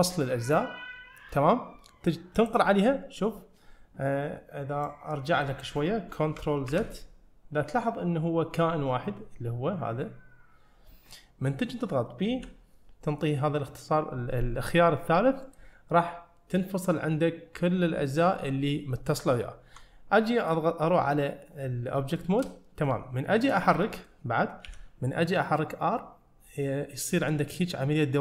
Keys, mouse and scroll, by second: 4.9 click, 7.0 ctrl+z, 19.3 scroll down 1, 19.8 Tab, 20.3 middle click, 22.3 shift+middle click, 22.8-23.5 scroll up 1, 23.5 drag, 23.9 middle click, 24.7 r.